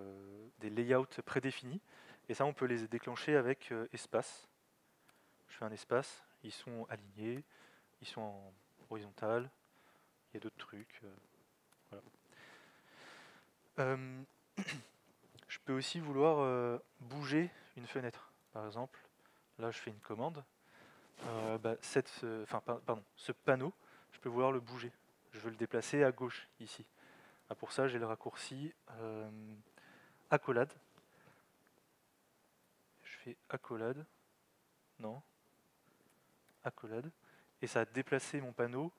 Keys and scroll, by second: 4.0 alt+x, 19.2-20.1 typing, 32.6 alt+x, 33.7 [, 36.0 alt+x, 36.5 shift+[.